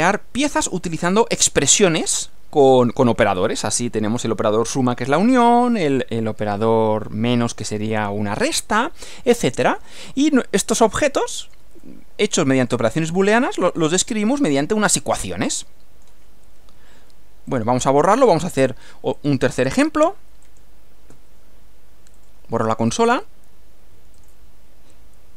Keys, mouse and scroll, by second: 10.7-11.7 middle drag, 11.9-12.9 middle drag, 15.6 middle click, 17.5 click, 18.7 Delete, 19.2 click, 20.1 Delete, 20.5 click, 21.1 Delete, 22.3 right click, 23.1 click, 24.2 click.